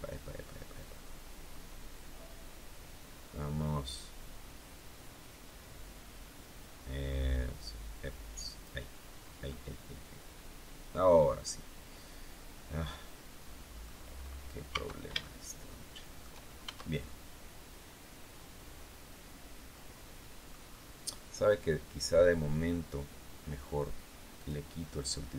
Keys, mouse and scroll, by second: 0.7-8.7 drag, 9.1 scroll down 1, 9.4-13.9 middle drag, 14.1-14.5 scroll up 2, 14.6 Tab, 15.1-16.3 shift+middle drag, 16.5 shift+Tab, 17.0-20.6 shift+middle drag, 24.3 click, 25.1-25.3 scroll down 2.